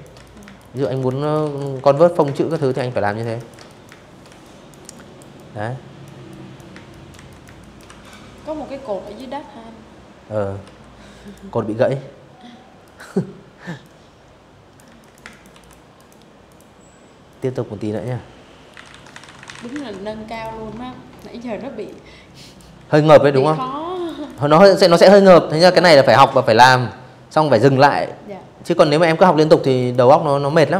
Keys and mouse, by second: 0.0-1.9 typing, 0.0 click, 0.3 click, 0.7 click, 1.0 click, 1.3 click, 2.1 click, 2.6 click, 3.0 click, 4.0 click, 4.4 space, 4.6 click, 4.8 z, 5.0 click, 5.1 space, 5.3 click, 5.5 v, 5.7 click, 6.7 click, 8.3 v, 8.9 click, 10.5 click, 11.5 click, 12.5 z, 12.7 click, 12.9 space, 13.0 click, 13.2 v, 13.3 click, 13.6 click, 14.1 click, 16.1-18.0 typing, 19.5 shift+click, 21.3 alt+shift+click, 21.9 click, 22.5 click, 23.2-24.3 alt+shift+drag, 27.5 click, 28.1 click, 28.8 click.